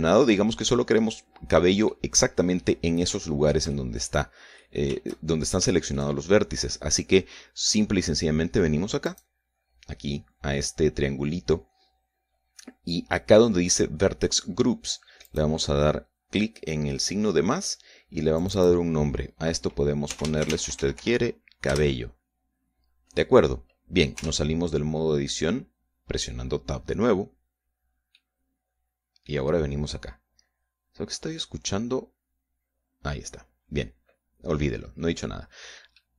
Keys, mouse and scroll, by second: 3.8 shift+middle click, 4.8 shift+middle click, 5.2 middle click, 6.0 shift+scroll down 3, 6.4 shift+middle click, 9.7 click, 15.9 click, 19.0 click, 20.5-22.1 typing, 22.4 Return, 24.8 Tab, 28.8-30.1 middle drag.